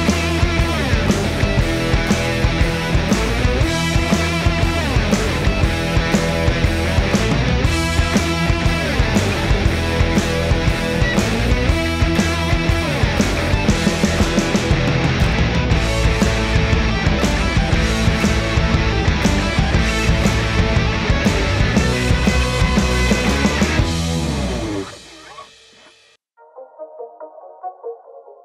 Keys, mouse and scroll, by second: 1.5 click, 4.4 click, 9.7-15.3 drag, 15.3-23.2 drag, 23.2 space, 27.4 -.